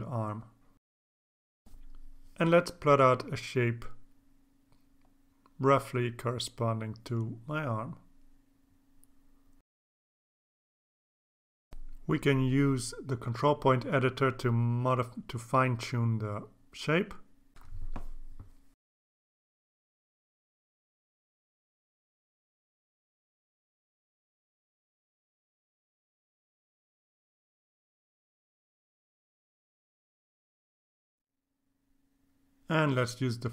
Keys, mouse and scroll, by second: 0.7 click, 3.8 click, 4.4-5.1 scroll up 2, 5.8 click, 7.2 click, 7.6 click, 9.6 click, 10.5 click, 11.0 click, 12.0 click, 13.8 click, 15.7 click, 16.9 click, 17.6 click, 20.6 click, 22.1-23.3 drag, 25.4 click, 26.9 click, 29.0 click, 30.5-31.9 drag, 32.9 click.